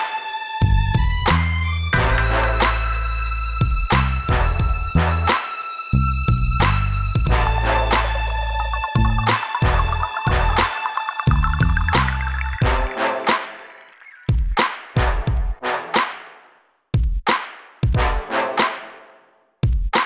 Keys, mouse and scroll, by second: 1.5 click, 5.5 scroll up 2, 6.5 click, 8.3 scroll up 2, 9.5 scroll up 2, 10.7 click, 11.6 scroll down 2, 12.9 scroll up 2, 15.0 scroll down 2, 17.4 scroll up 2, 18.6 scroll down 2.